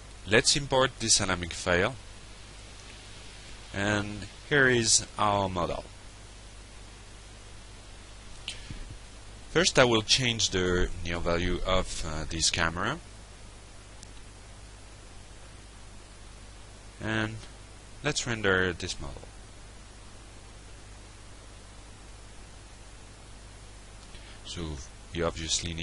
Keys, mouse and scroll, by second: 0.4 click, 0.6 f, 1.0 alt+middle click, 1.3-2.0 alt+drag, 2.3 alt+middle drag, 2.8 alt+click, 4.8 click, 5.9 click, 7.1 click, 8.0 shift+., 8.3 shift+0, 8.5 shift+1, 10.3 Return, 11.2 drag, 11.6 click, 11.9 f, 12.1-12.5 alt+middle drag, 12.8 alt+middle click, 13.2 alt+middle click, 13.6 alt+click, 14.6 click, 15.2 alt+click, 15.9-17.3 alt+drag, 17.4 alt+drag, 18.9 ctrl+r, 21.1 click, 22.8 ctrl+space.